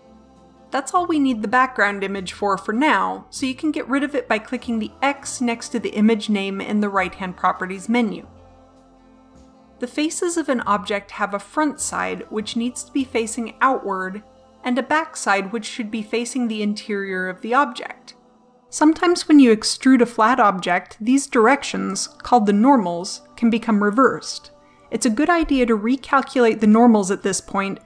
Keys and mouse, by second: 0.6 KP_7, 3.5-4.9 drag, 7.2-9.9 middle drag.